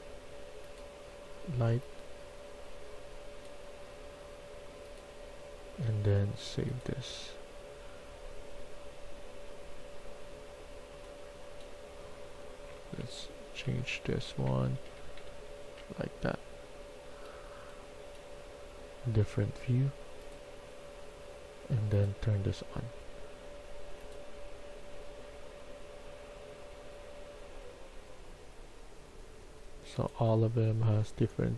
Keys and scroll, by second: 10.2-11.3 typing, 12.7-15.7 typing.